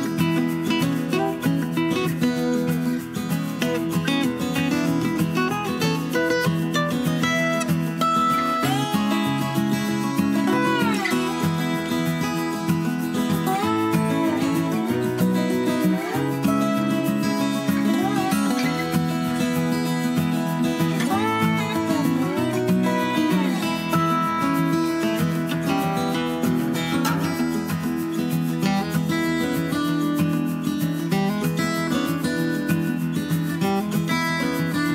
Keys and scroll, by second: 14.4 super+c, 14.5 super+v, 19.8 Up, 20.0 Up, 20.1 Up, 20.2 Up, 20.5 Page_Down, 20.6 Page_Down, 27.4 End, 27.9 Home, 29.5 Left, 29.6 Left, 29.8 Left, 30.0 Left, 30.1-32.6 Left.